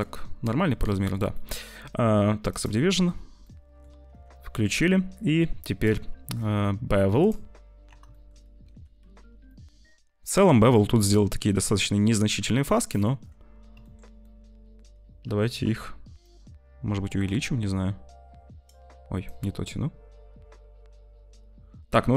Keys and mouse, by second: 0.9 middle click, 1.4 middle click, 2.4 middle click, 3.3 middle click, 7.1 middle click, 8.1 shift+middle click, 8.7 ctrl+s, 8.9 z, 9.4 shift+middle click, 11.1 click, 13.8 shift+click, 14.2 click, 16.3 shift+click, 19.3 shift+click, 19.9-22.1 shift+right drag.